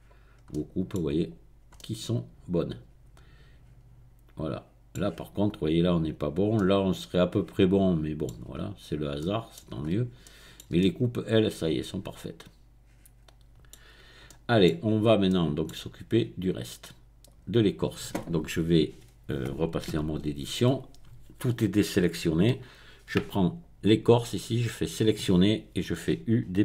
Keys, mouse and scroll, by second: 0.3-1.0 scroll up 1, 1.0 click, 8.6 Tab, 8.7-9.2 scroll down 1, 9.8-10.2 scroll up 1, 10.2-13.9 shift+middle drag, 13.9-14.2 scroll down 2, 14.2 middle click, 15.2 shift+middle click, 17.2 click, 20.0 Tab, 23.4 click, 24.4 click.